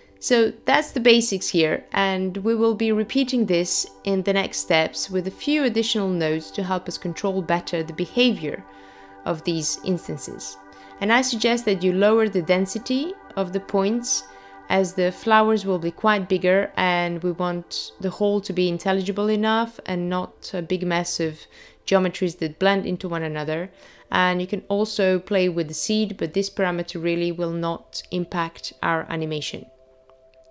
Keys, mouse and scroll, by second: 0.0 middle click, 4.6-5.6 scroll down 2, 5.6 middle click, 5.6-6.7 scroll down 1, 8.4 click, 15.0 click, 15.4 click, 15.9 click, 16.4 click, 16.8 click, 23.9 click.